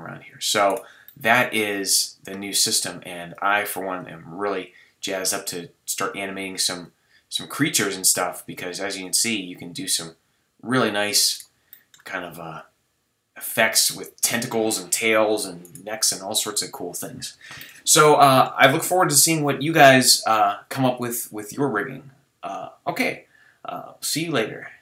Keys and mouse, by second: 2.7 middle drag, 2.9-3.4 drag, 4.8-5.9 drag, 5.9-6.8 middle drag, 6.8 click, 10.8-11.4 drag, 11.4-11.7 right drag, 11.7 middle drag, 12.6-14.3 drag, 12.6-13.5 middle drag, 12.6-13.5 right drag, 14.3-16.0 middle drag, 16.0 g, 16.6-17.3 middle drag, 19.5-24.8 middle drag.